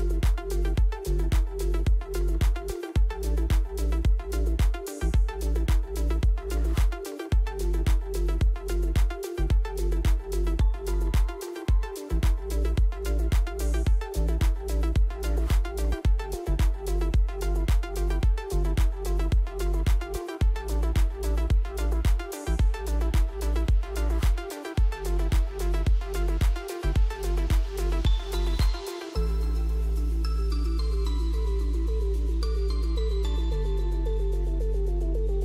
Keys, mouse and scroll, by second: 3.5-4.2 typing, 3.7 click, 10.2 click, 11.2 typing, 12.5 typing, 14.5-15.2 typing, 14.7 click, 17.0 click, 17.7 click, 20.7 click, 23.7 click, 25.6-28.0 typing, 29.4 typing, 31.3 click, 33.8 click.